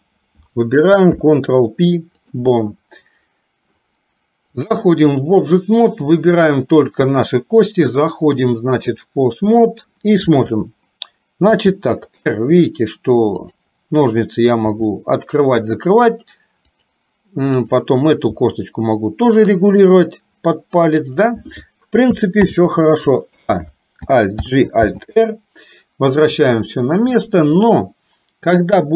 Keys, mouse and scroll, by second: 1.1 ctrl+p, 4.6 click, 6.3 click, 8.2 click, 11.6 r, 14.7 r, 17.6 click, 18.3 r, 22.5 ctrl+z, 23.3 a, 24.5 alt+g, 24.8 alt+r.